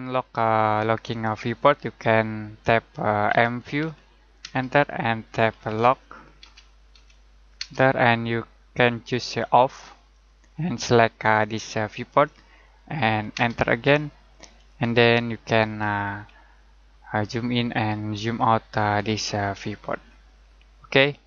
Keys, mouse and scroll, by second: 3.2 click, 3.6-7.5 typing, 10.1 click, 13.3 space, 14.5 click, 16.0-16.4 scroll up 1, 16.9-17.7 scroll down 1, 17.7 middle click, 18.3-19.0 scroll up 1, 19.0 middle click, 19.6-20.0 scroll down 1, 20.0-20.9 scroll up 1, 20.9 click.